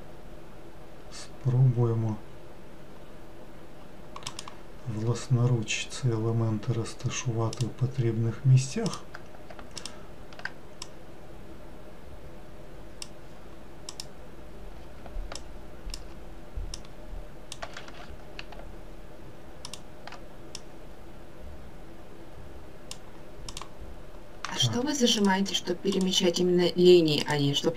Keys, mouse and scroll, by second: 8.8 click, 9.8 alt+click, 10.8 click, 13.8 click, 15.3 alt+click, 16.7 click, 17.8 ctrl+z, 19.6 alt+click, 20.5 click, 23.5 click, 24.8 3, 25.1 click, 25.9 click, 27.2 click.